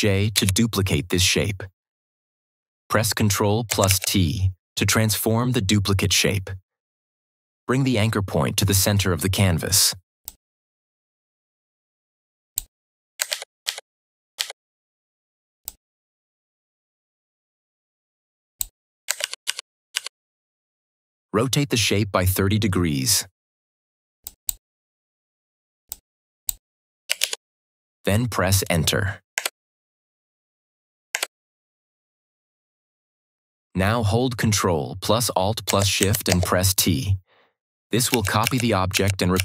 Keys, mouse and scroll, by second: 0.2 ctrl+j, 3.7 ctrl+t, 10.2 ctrl+t, 10.5-12.7 drag, 13.2 ctrl+=, 15.6-18.7 drag, 19.1 ctrl+-, 24.1 ctrl+-, 24.2 click, 26.7-27.6 typing, 29.9 Return, 35.5 ctrl+Return, 37.9 ctrl+alt+shift+Return, 38.0 ctrl+alt+shift+t.